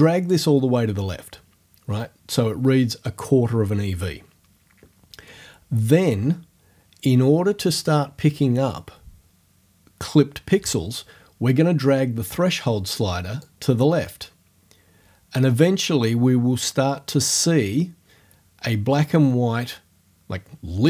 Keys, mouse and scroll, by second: 0.0 click, 13.4-20.8 drag.